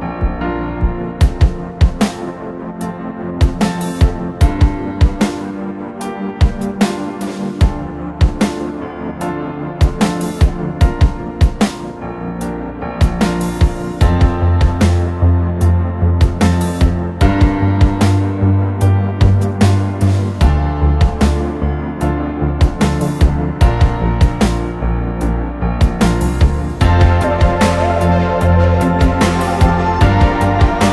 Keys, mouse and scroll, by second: 0.2-1.6 typing, 0.7 ctrl+z, 0.7 ctrl+z, 3.0 Delete, 3.4 space, 3.8 r, 5.6-6.8 typing, 7.0 middle click, 11.4 space, 12.4 middle click, 12.6-15.4 typing, 16.0-18.5 middle drag, 16.3-17.5 scroll down 1, 17.5-18.5 scroll down 1, 18.8-21.0 typing, 19.0 click, 20.3 click, 20.5 scroll up 1, 20.7 middle click, 20.9 scroll down 1, 22.2 Delete, 22.4 Delete, 23.5 Delete, 23.7 scroll down 1, 23.8-24.1 scroll up 1, 24.1 r, 24.4 click, 25.6-30.9 typing.